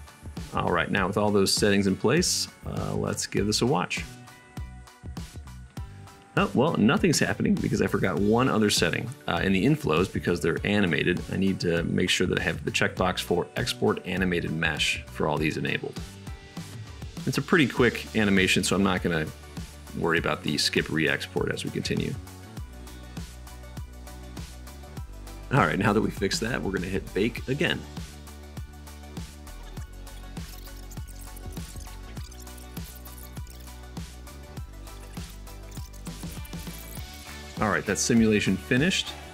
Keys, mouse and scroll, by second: 0.0-24.4 right drag, 1.6 super+s, 2.5 n, 18.9 click, 18.9 middle click, 21.2-24.4 drag, 21.2-25.3 middle drag, 25.3-27.3 drag, 27.3-38.5 middle drag, 38.5-39.3 drag.